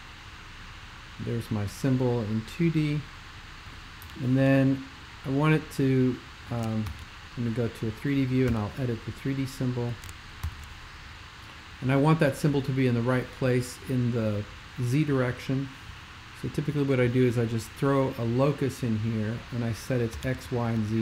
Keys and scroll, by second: 4.0 super+[, 6.9 alt+shift+super+l, 8.5 super+[, 10.4 alt+shift+super+k, 20.2 0, 20.2 Tab, 20.4 0, 20.7 Tab.